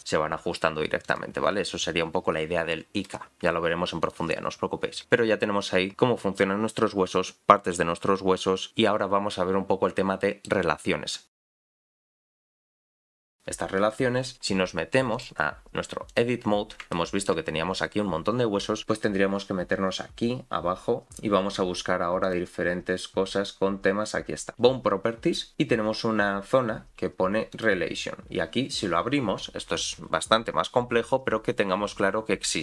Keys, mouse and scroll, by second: 4.0-5.0 drag, 9.6-9.9 scroll down 2, 10.2 shift+middle click, 10.9 scroll up 4, 14.3-15.1 scroll down 2, 15.1-16.2 drag, 16.9 shift+middle click, 18.6-19.3 scroll up 2, 19.8-21.0 scroll down 2, 21.0-22.2 scroll down 8, 22.2 click, 27.5 click, 28.2-29.3 scroll down 6, 29.3-32.4 scroll down 2.